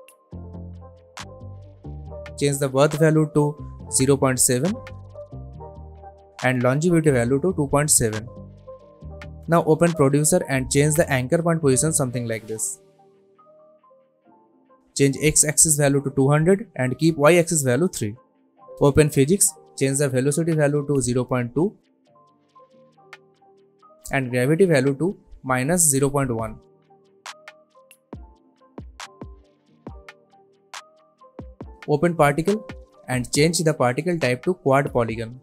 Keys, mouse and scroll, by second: 0.4 click, 3.9 click, 5.8 Return, 7.1 click, 8.6 Return, 10.7 click, 12.8-14.2 drag, 17.1 Return, 19.0 click, 23.5 Return, 24.6 click, 27.1 Return, 29.0-29.6 click, 29.4 space, 32.9 click.